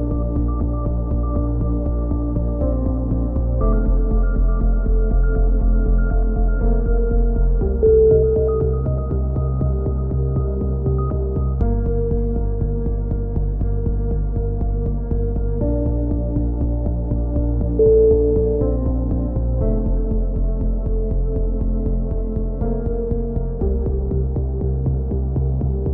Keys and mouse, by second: 1.0-3.1 typing, 2.6 middle click, 4.5 s, 7.0-8.3 drag, 9.1 click, 9.7 e, 10.6-12.1 drag, 13.9 s, 15.5-16.9 drag, 17.0 c, 18.5 right click, 18.8-20.2 middle drag, 20.2 right click, 21.0 s, 22.1 c, 24.0 right click, 24.3 click.